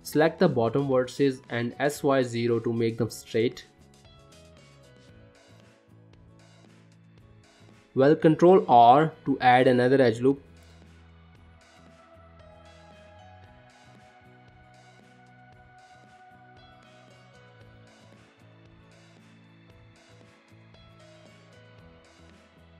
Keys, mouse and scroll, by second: 1.6 s, 3.9 g, 9.2 ctrl+r, 13.6-13.9 scroll up 1, 14.0 shift+middle click, 14.8 click, 15.3 g, 17.0 click, 17.6 click, 18.2 click, 18.8 g, 20.7 click, 21.1 g.